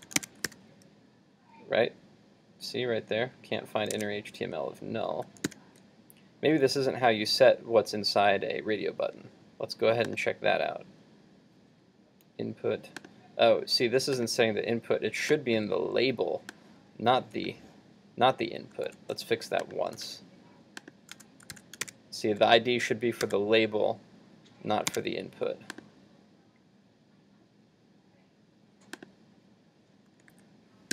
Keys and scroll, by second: 0.0 super+s, 0.3 super+Tab, 0.5 super+r, 3.9 super+Tab, 4.7 super+z, 5.5 super+s, 18.9 super+x, 20.1 super+v, 21.6 super+s, 22.0 super+Tab, 23.3 super+r, 25.0 super+Tab, 30.3 super+z.